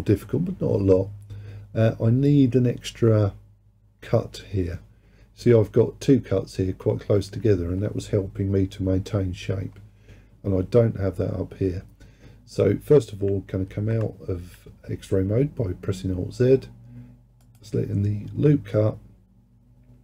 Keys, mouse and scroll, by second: 13.7 alt+z, 17.5-20.0 drag.